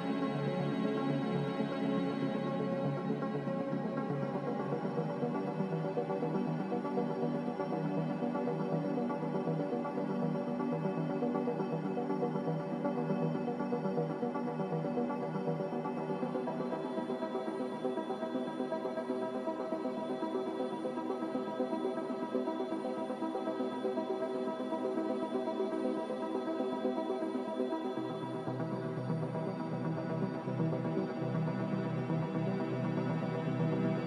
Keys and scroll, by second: 4.3 z, 11.1 5, 11.1 0, 11.6 Return, 19.1 a, 21.8 b, 25.9 z, 28.9 typing, 32.2 b.